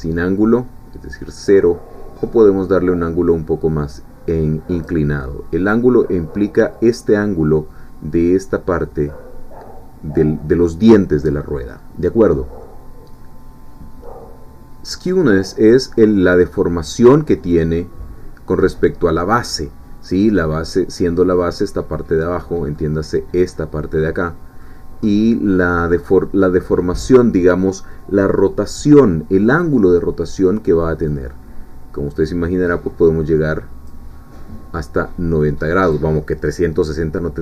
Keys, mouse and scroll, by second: 0.2-5.0 drag, 15.4-20.3 drag, 22.2 middle click, 24.1 middle click, 25.1-26.4 middle drag, 31.1-34.1 drag, 35.4 click, 37.3-37.4 middle drag.